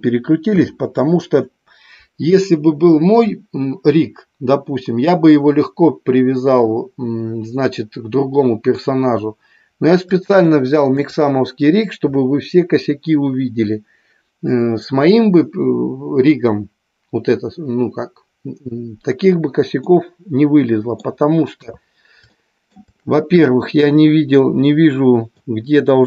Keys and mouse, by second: 0.4 KP_3, 10.5-10.9 shift+middle drag, 19.7-21.2 middle drag, 21.4 KP_3, 22.3-22.7 shift+middle drag, 23.5 shift+middle drag, 24.7-25.3 middle drag.